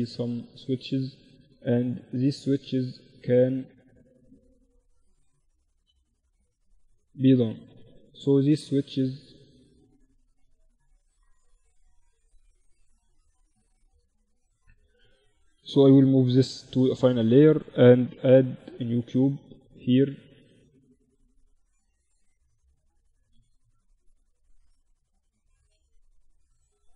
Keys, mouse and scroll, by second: 0.8 z, 1.1 z, 3.1 Tab, 3.5 Tab, 4.0 Tab, 5.3 a, 6.5 ctrl+2, 8.8-10.7 drag, 9.9 ctrl+z, 12.3 Tab, 14.7 m, 16.3-17.9 right drag, 16.6 Tab, 16.8 Tab, 17.5 KP_1, 18.1 z, 20.5-25.2 drag, 23.6 shift+a.